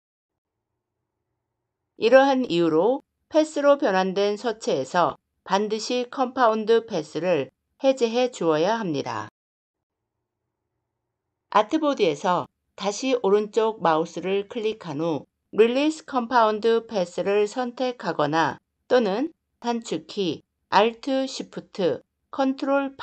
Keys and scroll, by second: 20.5 ctrl+alt+shift+8.